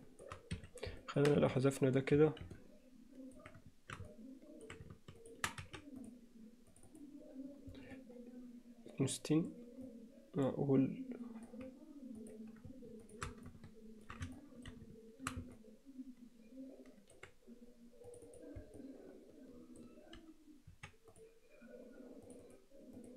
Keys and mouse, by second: 1.0 alt+middle click, 1.4 x, 2.6 middle click, 4.1 middle click, 5.2 shift+click, 5.6 x, 6.9 click, 8.0-9.5 middle drag, 9.9-11.5 middle drag, 13.5 middle click, 14.4 shift+middle click, 15.6-17.2 middle drag, 18.3 click, 18.8-19.8 middle drag, 20.7 x, 22.3 click, 22.5 click, 23.0 click.